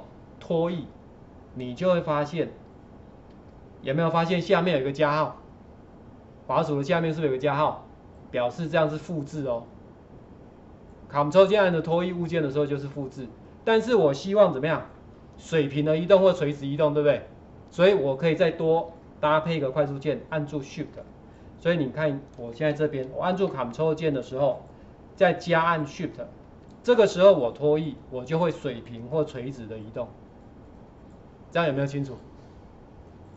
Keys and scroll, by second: 3.3 ctrl+4, 18.0 4, 22.7 ctrl+z.